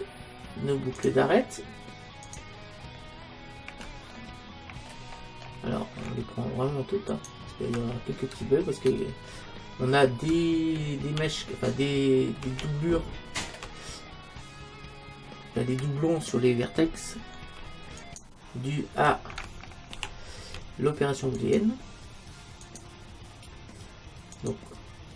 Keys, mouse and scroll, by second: 4.1-5.6 middle drag, 7.1-8.4 right drag, 8.4 space, 10.3 space, 14.0-18.0 middle drag, 18.0-19.8 right drag, 20.0 ctrl+z, 21.4-25.1 right drag.